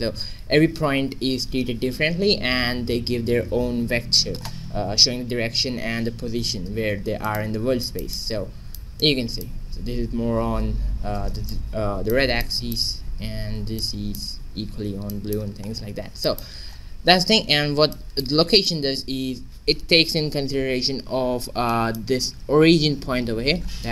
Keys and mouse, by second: 0.2 q, 2.0 g, 7.8-15.7 middle drag, 15.5 shift+z, 16.2-18.5 middle drag, 18.5-19.7 drag, 21.6-23.6 middle drag.